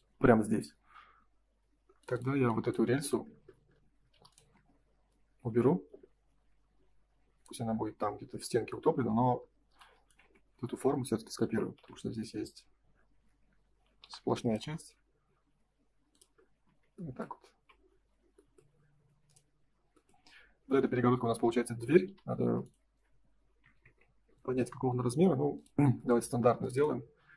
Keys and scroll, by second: 5.8 F3, 8.9 space, 9.6 m, 11.7 F4, 16.4 space, 16.6 Escape, 17.4 ctrl+s, 24.3 Return, 26.2 space.